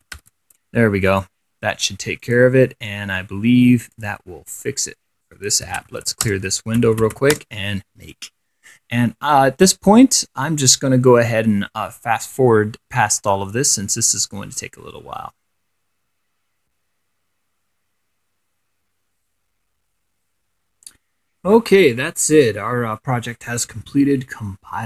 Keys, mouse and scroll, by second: 0.0-0.9 typing, 1.3 click, 1.7 middle click, 2.4 click, 2.8 middle click, 4.1 click, 4.4 middle click, 4.9 click, 5.3 middle click, 5.6-7.9 typing.